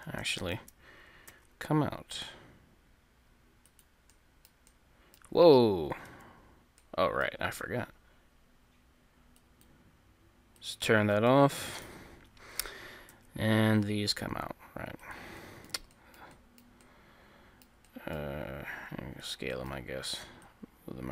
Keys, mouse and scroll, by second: 0.4-2.3 right drag, 1.3 e, 4.1-6.1 middle drag, 6.1 ctrl+z, 6.7 middle click, 9.4-12.9 drag, 11.3 middle click, 11.8 KP_3, 13.1 e, 15.4 middle click, 16.5-18.3 middle drag, 18.7 s.